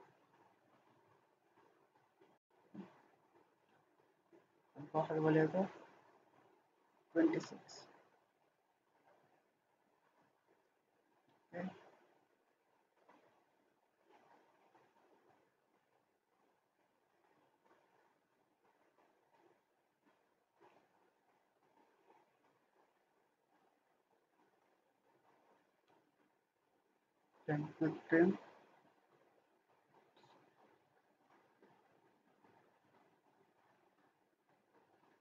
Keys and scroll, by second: 1.9 typing, 2.4 Return, 6.7-7.4 typing, 8.5 Escape, 25.6 Escape, 30.4 ctrl+z, 31.3 ctrl+z.